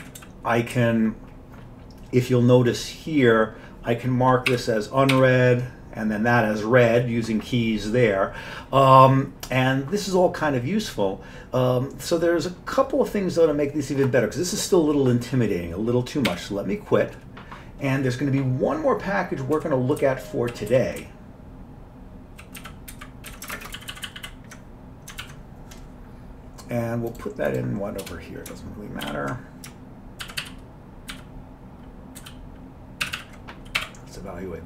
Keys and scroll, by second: 0.0 Up, 0.2 Up, 0.7 Down, 4.5 u, 5.2 r, 16.3 q, 19.6 Page_Down, 20.0 Down, 20.5 Down, 20.7 Page_Down, 21.0 Down, 21.5-22.1 Down, 22.3 Down, 23.0 Up, 23.3 Down, 23.6 ctrl+shift+space, 23.8 ctrl+n, 24.0 ctrl+n, 24.1 ctrl+n, 24.2 ctrl+n, 25.3 alt+w, 28.0 Return, 29.1 ctrl+y, 30.2 ctrl+x, 30.4 ctrl+s, 31.1 ctrl+x, 32.2 ctrl+s, 33.1 ctrl+c, 33.2 ctrl+c, 33.8 y.